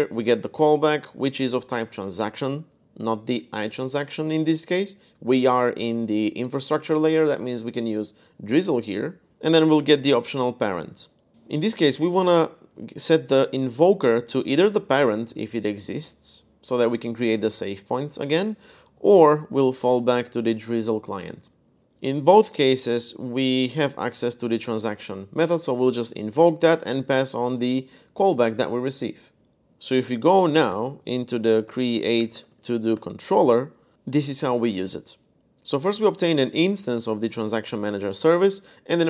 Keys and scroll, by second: 0.0-0.9 typing, 9.3 typing, 11.1-12.5 typing, 14.0-14.3 typing, 18.3 typing, 22.1-24.5 typing, 25.7-26.5 typing, 29.5-32.8 typing, 35.3-38.4 typing.